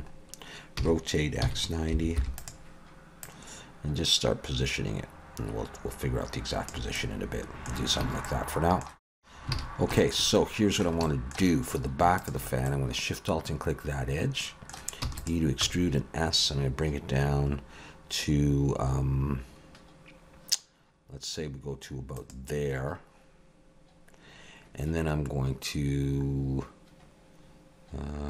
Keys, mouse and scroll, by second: 0.1 scroll up 2, 0.8 r, 3.2 click, 7.0 middle click, 8.2 middle click, 9.5 alt+a, 9.7 scroll up 3, 10.0 shift+middle click, 10.3 middle click, 11.1 shift+middle click, 12.2 alt+shift+click, 12.7 middle click, 15.0 e, 15.7 s.